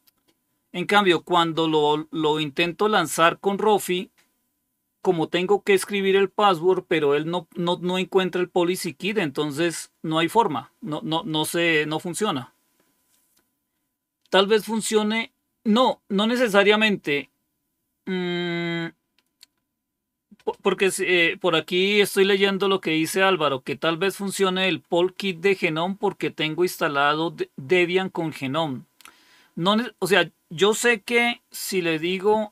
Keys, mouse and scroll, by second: 0.0 Return.